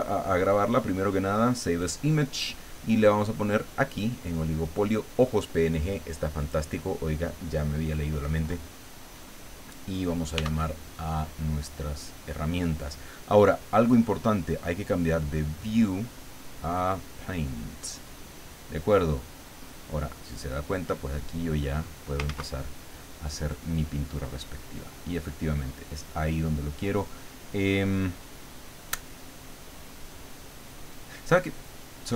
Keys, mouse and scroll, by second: 1.8 click, 6.4 click, 10.3 t, 15.6 click, 17.0 click, 18.6-19.7 middle drag, 20.2-21.9 drag, 22.3 ctrl+z, 24.0 click, 24.8 click.